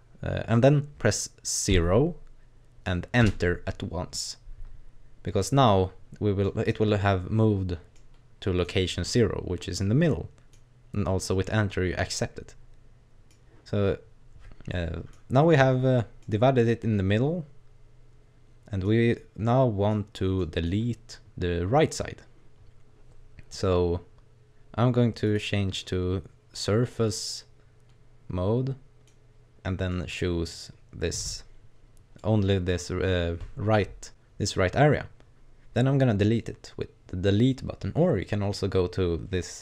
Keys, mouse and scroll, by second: 5.9-6.4 scroll up 1, 6.4 middle click, 7.9 middle click, 10.0 middle click, 12.0 middle click, 14.7 middle click, 15.9-16.3 scroll down 2, 16.2 middle click, 19.5 middle click, 20.4 middle click, 20.7-21.2 scroll up 2, 25.2 click, 26.5 right click, 26.9 middle click, 29.9 middle click, 30.8-32.2 scroll up 1, 32.2 middle click.